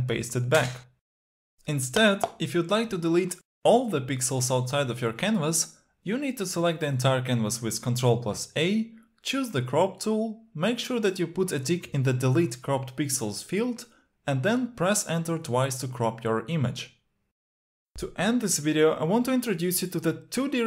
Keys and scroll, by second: 8.3 ctrl+a.